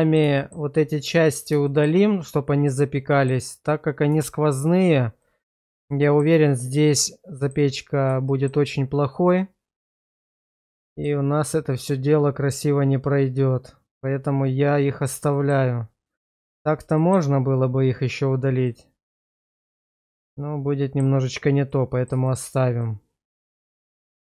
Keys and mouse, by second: 0.4 shift+middle click, 1.7 shift+middle click, 2.7 middle click, 4.3 shift+middle click, 5.2 middle click, 6.1 shift+middle click, 6.9 middle click, 8.3 shift+middle click, 10.4 middle click, 12.5-15.1 middle drag, 15.3 shift+middle click, 17.0 shift+middle click, 18.7 middle click, 19.6 shift+middle click, 20.1 middle click, 21.7 middle click, 22.3 shift+middle click, 22.8-24.0 middle drag.